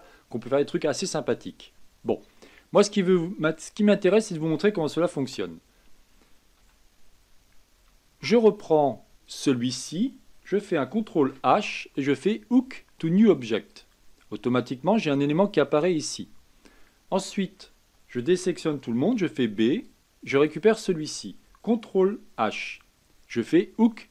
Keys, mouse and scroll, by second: 2.3 middle click, 3.1-3.5 scroll down 2, 3.5-5.2 middle drag, 5.2 KP_1, 6.6 a, 7.7 b, 11.1 ctrl+h, 17.6 a, 19.1 b, 22.1 ctrl+h.